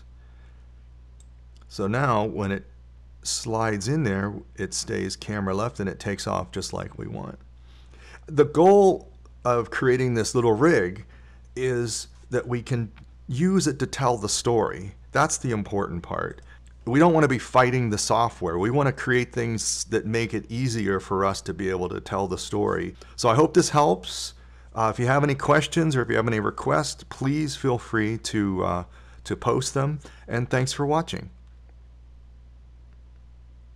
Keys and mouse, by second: 0.4 i, 3.4 click, 3.9 click, 4.3 click, 19.0 click.